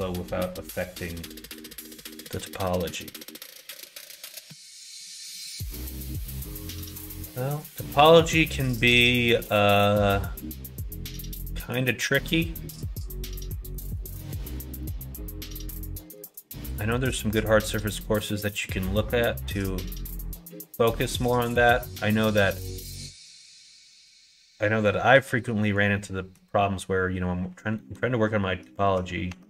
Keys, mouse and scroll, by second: 2.6 middle click, 3.3 middle click, 4.1 middle click, 4.8 middle click, 5.2 middle click, 5.6 middle click, 6.1 middle click, 6.6 middle click, 7.3 shift+middle click, 8.3 middle click, 9.1 shift+middle click, 9.7 middle click, 10.3 middle click, 11.3 middle click, 12.4 middle click, 13.5 shift+middle click, 13.9 middle click, 14.8 middle click, 15.9 shift+middle click, 16.5-17.6 middle drag, 17.9 middle click, 19.8 middle click, 21.1-22.9 middle drag, 24.8 middle click, 25.9 middle click, 26.6 middle click, 27.7 middle click, 29.3 Tab.